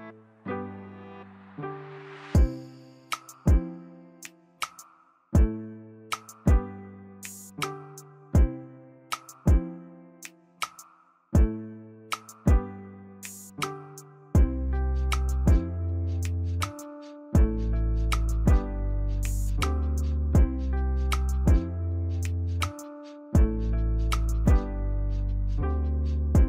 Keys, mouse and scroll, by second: 7.9 ctrl+=, 8.4 ctrl+=, 14.1 0.